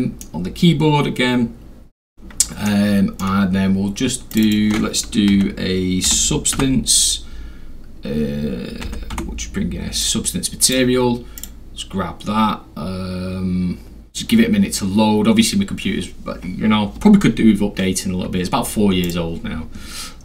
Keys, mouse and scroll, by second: 0.4 scroll down 2, 0.6-1.1 scroll, 1.1 scroll up 2, 1.2-2.4 scroll, 2.7-3.1 middle drag, 2.7 scroll, 4.3 click, 4.4 click, 5.3 s, 6.1 u, 6.5 b, 8.8 s, 9.2 t, 10.0 click, 11.4 click, 19.0 click.